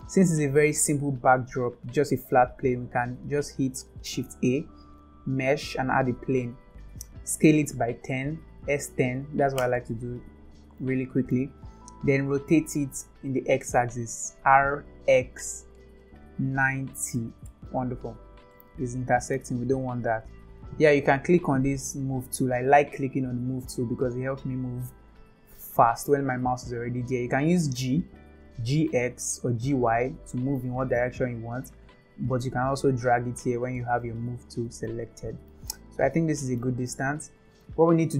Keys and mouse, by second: 4.1 shift+a, 8.0 s, 10.8-11.4 middle drag, 13.9 r, 18.5-19.3 middle drag, 23.5 click, 27.8 g, 32.4-33.7 drag, 34.5 click, 35.4-36.6 middle drag.